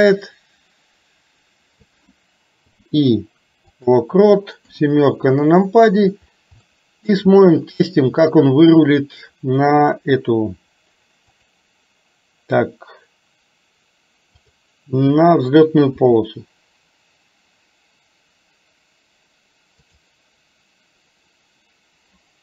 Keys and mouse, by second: 4.7 KP_7, 6.7 shift+middle click, 11.3 click, 14.5 click, 16.1 r.